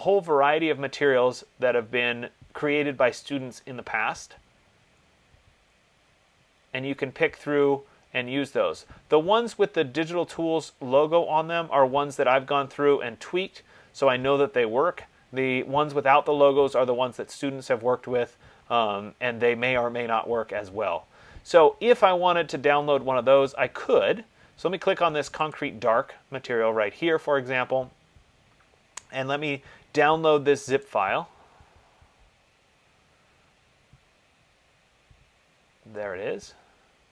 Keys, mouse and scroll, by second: 0.3-0.9 scroll, 0.9-2.8 scroll, 2.8-3.7 scroll, 3.7-5.4 scroll, 5.4-12.0 scroll, 12.0-12.6 scroll, 12.8-13.4 scroll, 13.8-17.3 scroll, 17.8 middle click, 17.9 middle click, 18.1 middle click, 18.3 middle click, 19.0 middle click, 19.1 middle click, 19.2 middle click, 19.9 middle click, 19.9 middle click, 20.1 middle click, 20.7 middle click, 20.8 middle click, 21.1 middle click, 21.2 middle click, 25.7 click, 31.0 click.